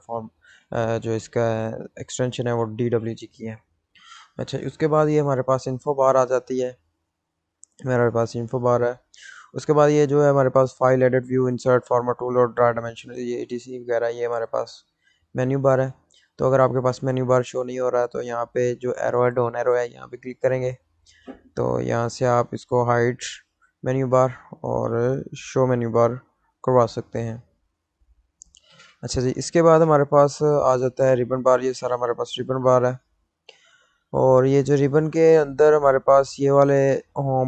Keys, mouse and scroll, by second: 6.4 click, 20.2 scroll up 1, 20.7 click, 27.9 click, 28.7 scroll up 1, 37.1 click.